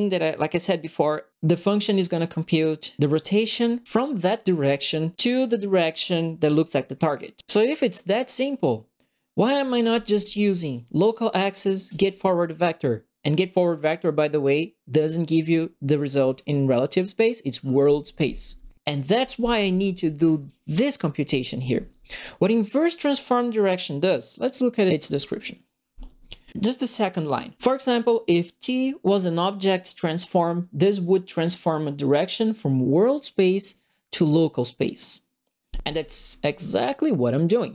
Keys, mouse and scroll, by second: 10.7 click, 11.8 click, 20.4 click, 21.6 click.